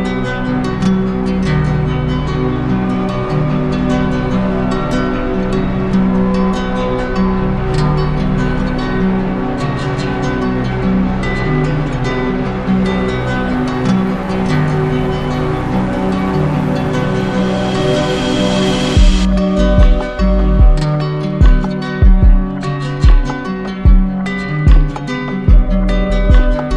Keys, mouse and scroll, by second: 0.8 ctrl+z, 10.0-11.1 drag, 15.1 click, 15.3 ctrl+z, 17.8 click, 17.9 ctrl+z.